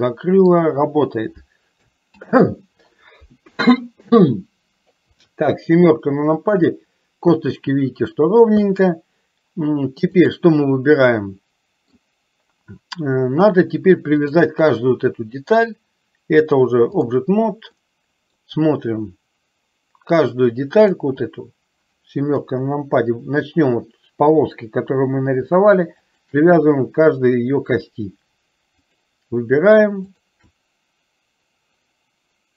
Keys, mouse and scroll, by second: 2.3 ctrl+z, 5.2 KP_7, 10.3 click, 11.3 middle click, 14.3 click, 16.5 click, 18.0 middle click, 21.0 click, 22.5 KP_7, 26.1 shift+click, 29.0 click.